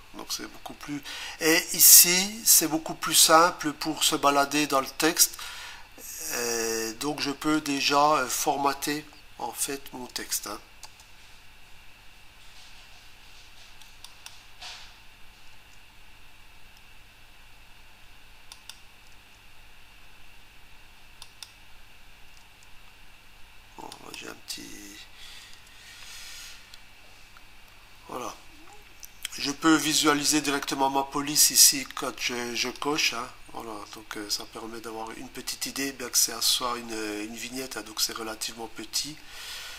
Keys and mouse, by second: 7.5 click, 9.4 BackSpace, 14.1 click, 15.5 Return, 18.5 click, 19.1 Return, 21.2 click, 22.4 Return, 23.9 click, 25.5 BackSpace, 32.7 click.